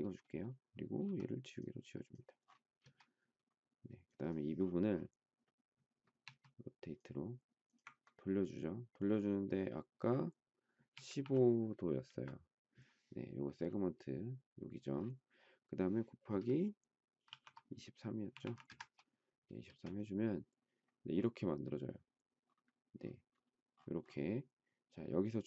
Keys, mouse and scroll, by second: 1.0 e, 2.8 space, 6.2 q, 10.7 typing, 12.1 Return, 12.1 typing, 17.3-19.6 typing, 18.6 Return.